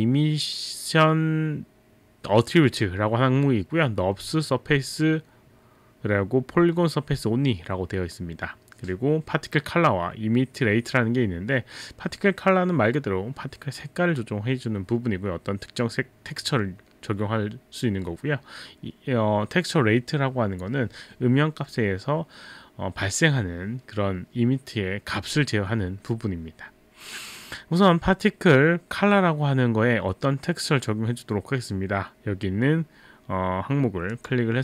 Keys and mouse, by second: 34.1 click.